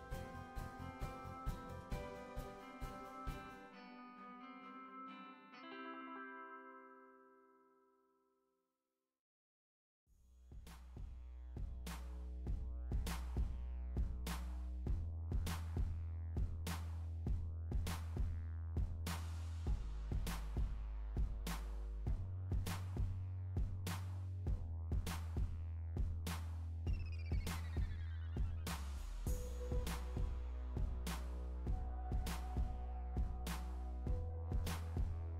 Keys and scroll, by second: 3.7 Right, 20.5 Down.